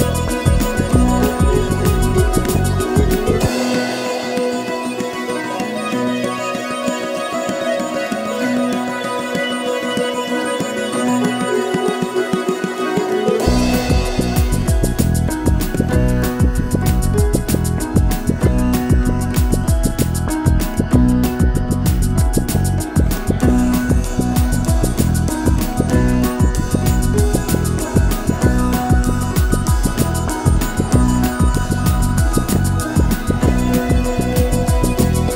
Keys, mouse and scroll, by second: 0.0-0.4 typing, 1.1 middle click, 1.4 click, 1.6 g, 1.8 g, 2.1 g, 2.2 1, 2.3 click, 2.6 alt+m, 2.8 click, 2.8 shift+click, 3.0 alt+m, 3.1 scroll down 3, 3.2 middle click, 3.8-13.4 typing, 4.1 middle click, 4.8-5.2 middle drag, 6.0 scroll up 1, 6.2 click, 6.6 click, 7.2 click, 7.6 click, 7.7 shift+middle click, 8.2 click, 8.6 click, 9.0 click, 9.5 click, 10.2 click, 10.5 click, 10.9 click, 12.0 click, 12.2 click, 12.5 click, 12.7 shift+click, 13.1 click, 13.7 click, 13.8-14.5 middle drag, 14.5 f, 14.6 click, 14.6-15.0 middle drag, 15.0 ctrl+r, 15.3 click, 15.3 middle drag, 15.5 shift+click, 15.6 f, 15.7 click, 15.8 shift+click, 15.8 middle click, 16.0 f, 16.1 a, 16.2 a, 16.3-17.2 shift+middle drag, 17.2 click, 18.3 middle click, 18.6 click, 18.8 click, 19.0-21.6 typing, 19.1 middle click, 20.0 click, 20.4-20.8 middle drag, 21.0 click, 21.0 middle click, 21.3 shift+click, 21.5 click, 21.7 click, 21.8 shift+click, 21.9 click, 22.2 scroll down 1, 22.3 Left, 22.5 middle drag, 22.7 1, 23.2 Left, 23.3 shift+middle drag, 23.8 shift+Left, 23.9-24.2 middle drag, 24.2 g, 24.5 shift+middle click, 24.8 drag, 25.2 middle click, 25.4 y, 25.7 ctrl+z, 25.8 g, 26.0 shift+middle click, 26.3 3, 26.6 click, 26.7 middle click, 27.1 shift+click, 27.2 shift+click, 27.4-35.1 typing, 28.8 shift+middle click, 28.9 scroll up 1, 29.5 click, 29.7 click, 30.9 click, 31.5 alt+click, 32.7 scroll down 3, 32.7 shift+middle click, 34.7 shift+middle click, 34.9 click.